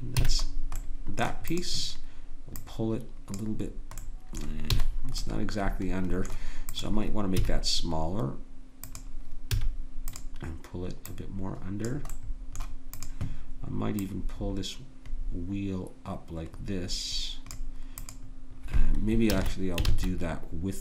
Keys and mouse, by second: 0.1 a, 0.7-2.0 drag, 3.3-4.7 drag, 4.7 a, 7.4 s, 8.2 click, 9.5 a, 10.1 click, 12.2-17.6 drag, 18.0-20.3 drag, 19.3 ctrl+z, 19.9 ctrl+z.